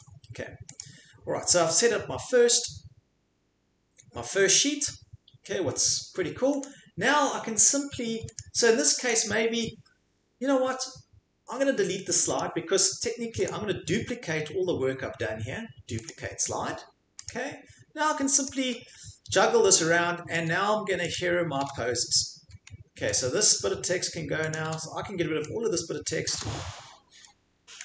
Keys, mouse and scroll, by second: 0.8 click, 6.6-8.4 scroll, 8.4 click, 9.1 right click, 12.4 click, 13.5 right click, 16.1 click, 17.3 click, 18.5 click, 20.4 Delete, 21.1 click, 21.6 Delete, 23.1 click, 24.5 click, 24.6 Delete, 26.2 click, 26.4 Delete.